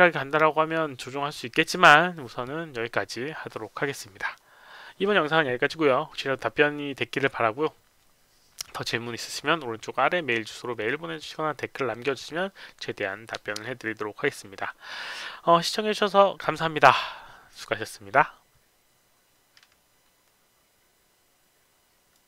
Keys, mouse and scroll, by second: 22.1 click.